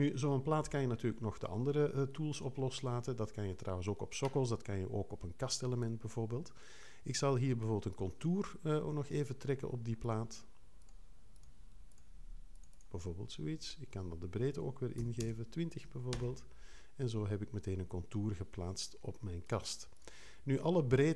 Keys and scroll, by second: 0.6 3, 14.7-15.7 typing, 16.1 Return.